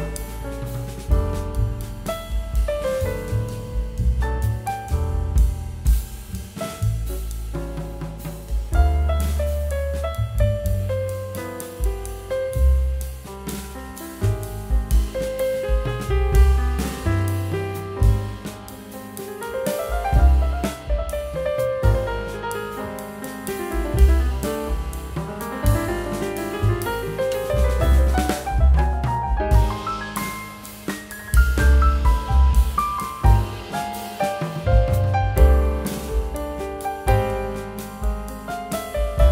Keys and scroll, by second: 2.7 ctrl+z, 5.3 space, 8.6 space, 12.0 space, 13.5 ctrl+z, 15.5 space, 18.4 space, 22.7 Return, 25.2 ctrl+j, 33.2 ctrl+t.